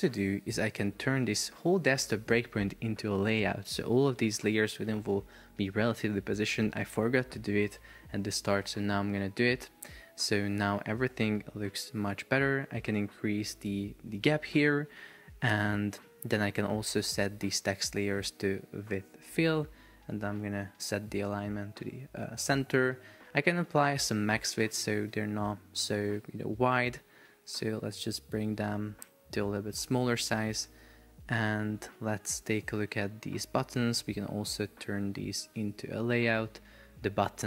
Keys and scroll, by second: 11.6 shift+Up, 12.7 shift+Down, 13.2 shift+Up, 13.9 shift+Down.